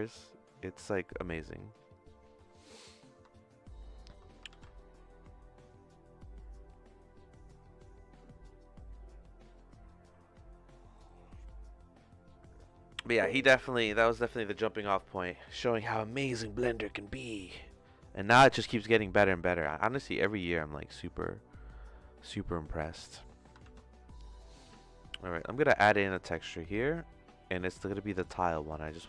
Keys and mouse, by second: 1.5-2.6 drag, 3.3 shift+middle click, 19.0 middle click, 20.6 click, 23.1 middle click, 23.6 shift+a.